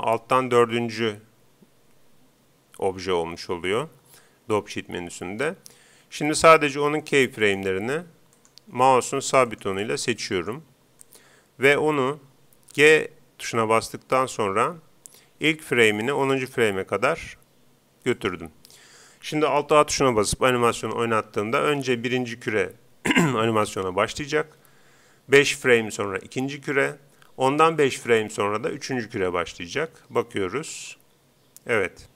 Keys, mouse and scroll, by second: 6.5-12.7 right drag, 12.8 g, 18.3-20.0 drag, 30.7 alt+a.